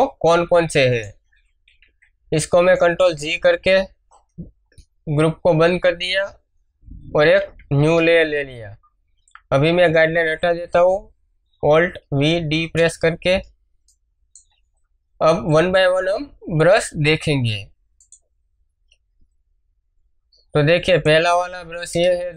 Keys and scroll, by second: 1.6 ctrl+g, 7.1 ctrl+shift+n, 7.7 Return, 11.9 alt+v, 17.0 b, 21.9 Return.